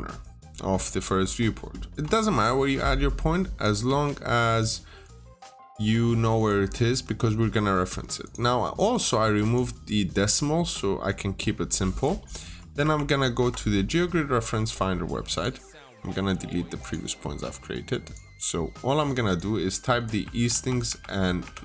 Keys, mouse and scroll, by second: 0.7 scroll down 1, 0.8 scroll up 1, 0.9 middle click, 2.2 click, 3.7 BackSpace, 4.3 click, 5.6 BackSpace, 6.2 click, 6.9 Escape, 7.7-8.1 scroll up 1, 8.1 click, 12.6 click, 12.8 alt+Tab, 15.2 click, 17.1-17.9 scroll down 1, 17.9 click, 18.2 scroll up 1, 18.9 click, 19.8-21.6 typing.